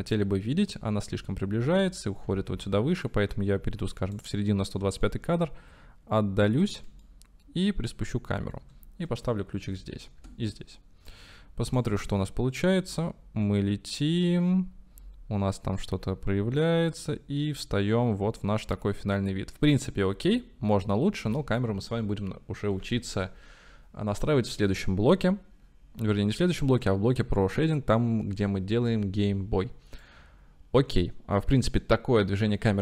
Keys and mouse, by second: 2.5 space, 3.2 click, 5.2-6.7 ctrl+middle drag, 7.2-8.7 shift+drag, 9.6 i, 10.3 i, 11.2 click, 12.0 space, 21.3 space, 30.1-32.8 drag.